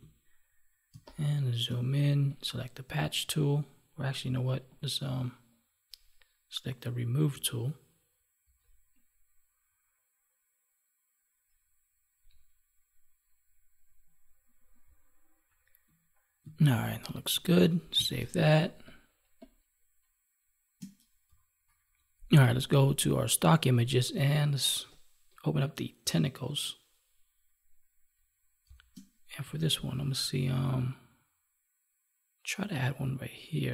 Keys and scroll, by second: 0.8 space, 15.4 F9, 16.7 ctrl+1, 18.1 space, 21.6 F9, 22.8 alt+Tab, 28.5 space, 29.4 ctrl+Tab.